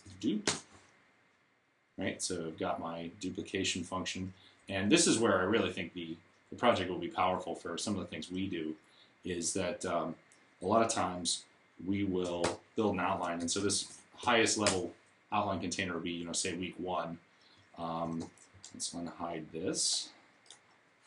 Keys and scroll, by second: 0.0-0.5 typing, 5.6 Down, 12.2 super+r, 13.6 k, 13.7 space, 14.1 1, 14.5 Return.